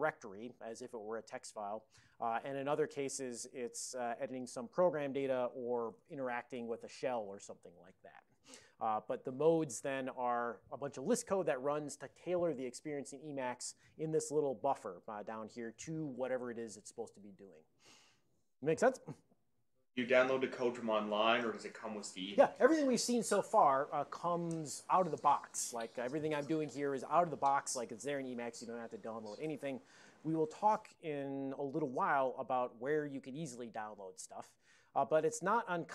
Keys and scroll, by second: 5.6-6.8 typing.